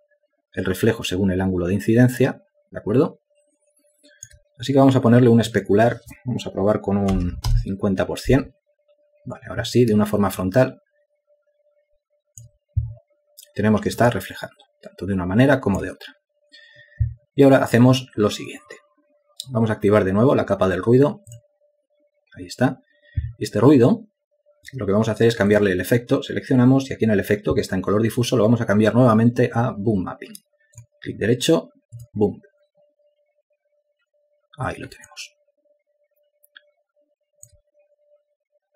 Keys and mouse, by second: 7.5-8.3 typing, 11.0 alt+click, 14.7 alt+click, 35.7 alt+click.